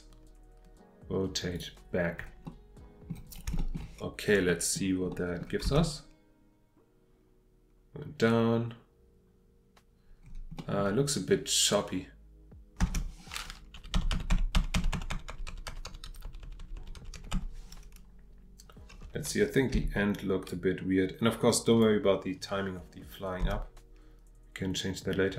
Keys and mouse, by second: 1.5 click, 2.5-3.1 middle drag, 4.5 middle click, 5.1 middle click, 10.6 click.